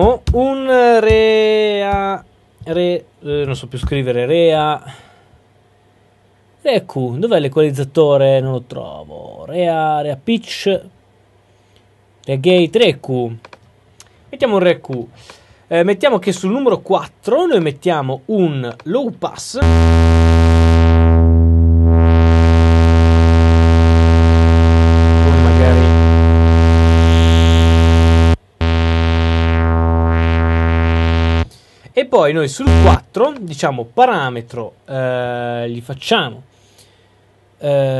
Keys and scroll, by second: 0.2 q.